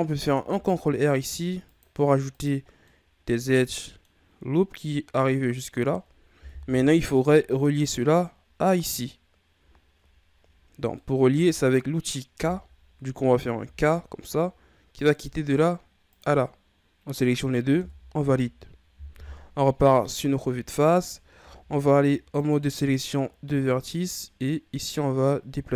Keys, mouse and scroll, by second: 0.4 ctrl+r, 2.6 scroll down 2, 2.8-5.8 middle drag, 6.5 KP_1, 7.5-9.7 scroll up 1, 9.7-10.5 scroll down 1, 10.5-11.0 scroll up 3, 11.0 middle click, 11.8-12.6 scroll up 1, 12.6-13.6 scroll up 1, 13.6 k, 19.1 KP_1, 21.3 ctrl+Tab, 23.2-23.9 scroll up 1, 23.9 right click.